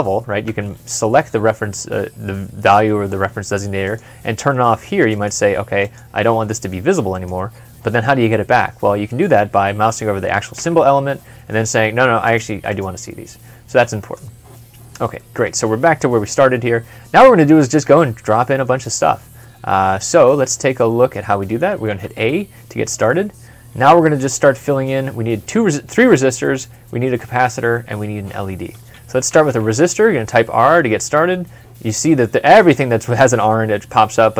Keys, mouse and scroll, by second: 0.4 e, 8.3 scroll up 1, 8.7 scroll down 1, 10.5 e, 12.5 double click, 15.0 double click, 15.1 middle click, 16.2 scroll up 1, 16.6 scroll down 1, 17.4 middle click, 21.7 a, 29.1 r.